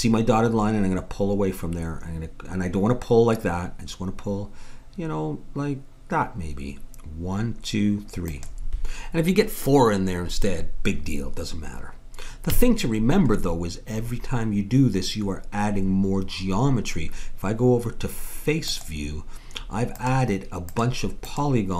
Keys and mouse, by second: 12.5 a, 13.5-15.9 middle drag, 18.7-21.7 drag.